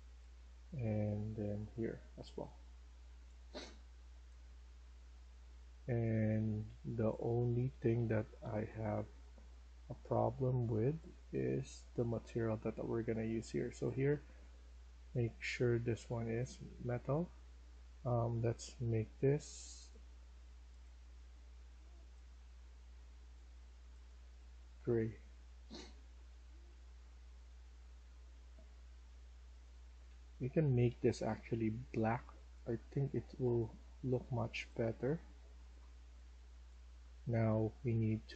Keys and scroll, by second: 2.0-9.0 typing, 24.0-28.7 typing, 29.8-30.5 typing, 35.4-38.3 typing.